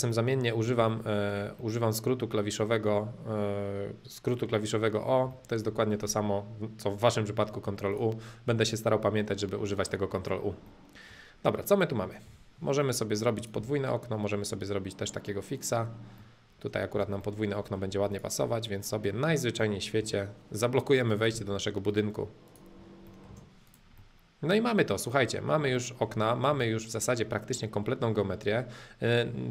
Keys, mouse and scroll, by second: 0.1 middle click, 0.9-3.7 shift+middle drag, 5.5-7.4 shift+middle drag, 7.5 middle click, 7.9-9.7 drag, 9.7-11.2 middle drag, 12.3 m, 13.3 click, 15.5 click, 16.1 middle click, 16.9 space, 17.3 middle click, 18.1 click, 18.5-18.8 scroll down 2, 18.8 middle click, 19.1-19.9 scroll down 2, 19.9 m, 21.1 click, 22.5 click, 22.9 middle click, 23.3 space, 23.7 click, 23.9-25.7 middle drag, 26.1-29.5 shift+middle drag.